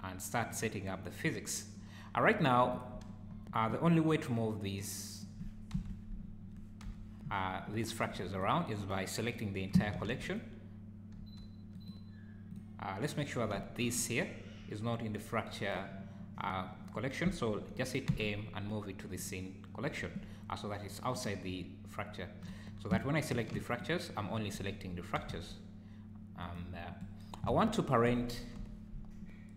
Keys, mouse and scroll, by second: 2.0 scroll down 3, 2.3 `, 2.7 click, 3.3-3.7 scroll up 3, 3.8 click, 4.7 click, 5.7 KP_Decimal, 6.8 KP_1, 7.3-7.7 scroll up 4, 8.3 click, 8.6 click, 9.9 shift+g, 11.1 g, 12.5 click, 13.0 click, 13.5 `, 13.9 click, 14.3-15.0 scroll down 2, 18.1 m, 21.1 click, 22.4 click, 23.3 shift+g, 25.2 r, 27.5 alt+a, 28.6 KP_1.